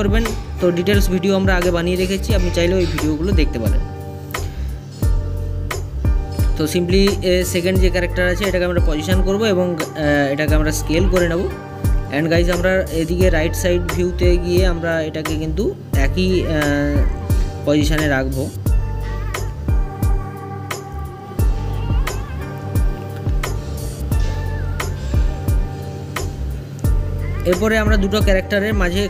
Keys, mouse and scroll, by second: 7.1 s, 11.2 click, 11.5-14.6 middle drag, 14.6 click, 15.8 middle click, 16.8 click, 21.3 s, 22.6 click, 23.7 click, 23.9-26.7 middle drag, 26.7 click, 27.9 click.